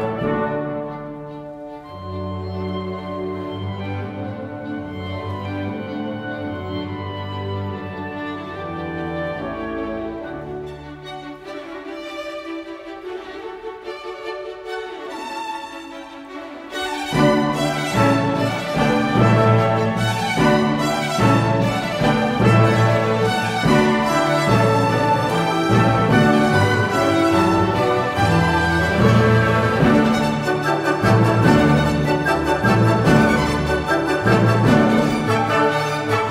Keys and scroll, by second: 1.4 typing, 14.1-14.4 typing, 22.6 typing, 24.5 typing, 26.5 typing, 29.9 0, 32.7-33.0 typing.